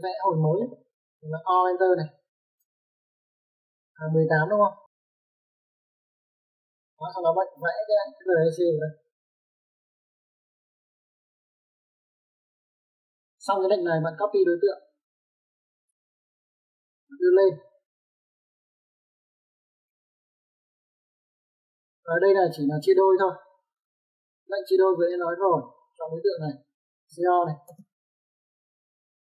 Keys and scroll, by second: 2.4 Escape, 2.6 o, 3.4 space, 5.2-6.0 typing, 7.4 space, 16.7-17.2 typing, 22.1 space, 27.9-28.5 typing.